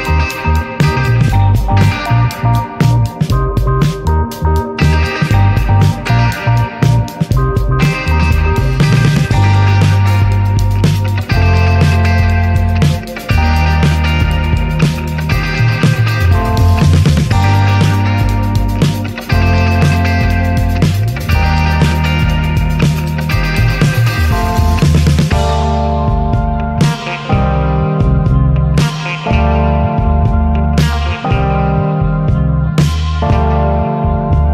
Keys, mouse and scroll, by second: 0.8 shift+scroll up 1, 1.5-6.9 drag, 6.9-7.4 middle drag, 7.4 drag, 7.7 alt+middle click, 7.9 middle drag, 8.2 drag, 8.4 shift+middle click, 8.6 shift+scroll up 1, 8.8 drag, 9.1-10.4 middle drag, 10.4-11.8 drag, 11.9-12.6 middle drag, 13.1 ctrl+s, 13.3 scroll up 2, 14.4 click, 15.4 click, 15.7 alt+middle click, 16.0 click, 16.3-17.2 shift+middle drag, 17.2 drag, 17.9 ctrl+1, 18.3 ctrl+2, 18.7 ctrl+3, 19.1 click, 19.3 scroll down 2, 19.5 alt+middle click, 19.8 alt+middle click, 20.2 ctrl+s, 20.3 drag, 20.6-22.2 shift+middle drag, 22.5 alt+middle drag, 22.9 ctrl+s, 23.4-23.7 alt+shift+middle drag, 23.9 click, 24.1 ctrl+s, 24.3 click, 24.8 shift+d, 26.1 click, 29.2-29.9 shift+middle drag, 29.9-31.2 drag, 31.8-32.6 middle drag, 32.9 alt+middle click, 33.4 click, 33.7-34.5 shift+middle drag.